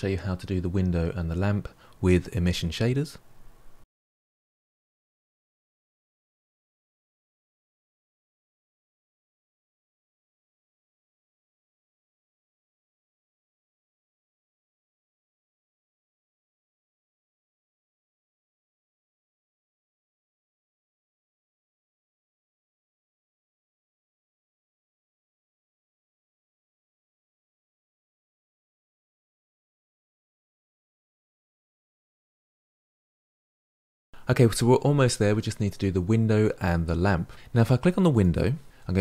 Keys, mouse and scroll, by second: 0.0 shift+click, 0.2 ctrl+l, 0.2 middle click, 0.3 click, 0.4 middle click, 0.5 shift+click, 0.7 ctrl+l, 0.7 middle click, 1.2 click, 1.4 o, 2.1 click, 2.3 shift+click, 2.5 shift+click, 2.6 ctrl+l, 2.6 middle click, 3.1 ctrl+l, 3.2 click, 3.4 middle click, 3.5 scroll up 3, 3.9 ctrl+l, 4.2 ctrl+l, 4.2 middle click, 4.4 click, 4.7 o, 5.3 click, 5.7 middle drag, 5.9 click, 5.9 shift+click, 6.2 ctrl+l, 6.2 middle click, 6.3 click, 6.4 click, 6.5 shift+click, 6.6 ctrl+l, 6.9 click, 6.9 shift+click, 7.1 ctrl+l, 7.1 middle drag, 7.2 scroll up 1, 7.2 middle click, 7.5 click, 7.7 shift+click, 7.9 middle click, 8.0 scroll down 2, 8.1 shift+click, 8.1 shift+click, 8.3 middle click, 8.5 shift+click, 8.5 shift+click, 8.6 ctrl+z, 8.7 scroll up 3, 8.8 shift+click, 8.8 shift+click, 8.9 middle click, 9.2 shift+click, 9.5 ctrl+l, 9.6 middle drag, 9.7 scroll down 2, 9.9 click, 10.1 shift+click, 10.2 ctrl+l, 10.4 middle drag, 10.7 click, 12.0-12.3 shift+middle drag, 12.1 click, 12.3 shift+click, 12.4 middle click, 12.5 shift+click, 12.7 middle click, 12.9 scroll down 4, 13.0 scroll up 4, 13.1 shift+click, 13.3 ctrl+l, 13.3 middle click, 13.4 scroll down 1, 13.5 middle drag, 13.7 shift+click, 13.8 ctrl+l, 13.8 shift+middle click, 14.4 click, 15.6 click, 15.8-16.3 middle drag, 16.3 scroll up 3, 16.4 shift+click, 16.5 shift+click, 16.8 scroll down 3, 16.8 middle click, 17.0 scroll up 1, 17.1 click, 18.2 click, 18.3 middle click, 18.5 click, 18.7 middle click, 19.3 ctrl+l, 19.4 middle click, 19.5 click, 21.2 click, 21.5 click, 21.6 shift+click, 21.7 shift+click, 22.3 ctrl+l, 22.4 click, 23.6 click, 23.7 shift+click, 23.8 ctrl+z, 23.9 click, 24.0-24.5 shift+click, 24.7 ctrl+l, 24.7 middle click, 24.9 click, 25.1 shift+click, 25.2 ctrl+l, 25.4 middle click, 25.7 ctrl+l, 25.8 middle click, 26.0 click, 26.2 o, 26.6 middle click, 26.9 click, 27.2 middle click, 27.3 click, 27.3 scroll down 2, 27.3 middle click, 27.6 click, 27.8 ctrl+l, 27.9 middle click, 28.0 scroll up 2, 28.1 scroll down 1, 28.1 click, 28.2-28.6 shift+click, 28.7 middle click, 28.8 shift+click, 28.9 ctrl+l, 29.0 middle click, 29.1 click, 29.5 middle click, 29.6 shift+click, 29.8 ctrl+l, 29.8 middle click, 29.9 click, 30.0 shift+click, 30.1 shift+click, 30.4 middle click, 30.8 shift+click, 30.9 ctrl+l, 30.9 middle drag, 31.0 click, 31.2 shift+click, 31.3 ctrl+l, 31.3 middle click, 31.5 click, 31.7 ctrl+l, 31.7 middle click, 32.0 scroll down 1, 32.1-32.6 middle drag, 32.6 scroll down 1, 32.8 shift+middle click, 33.4 click, 33.9 shift+middle click, 34.0 scroll up 2, 34.0-38.1 shift+middle drag, 38.1 click.